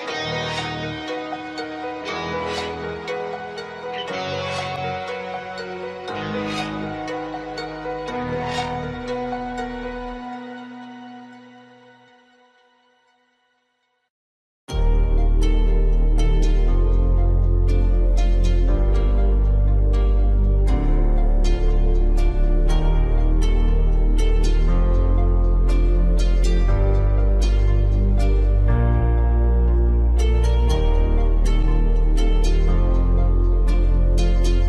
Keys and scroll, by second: 11.4 BackSpace, 31.0 ctrl+g.